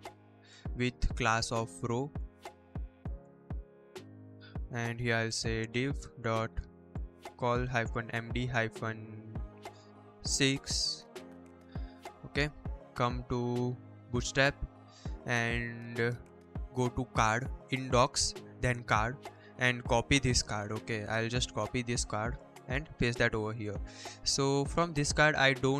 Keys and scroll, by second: 0.0-0.3 typing, 1.7-3.0 typing, 3.4 Return, 3.7 Return, 4.8-9.4 typing, 10.4 Return, 10.4 6, 10.8 Return, 22.7 ctrl+v.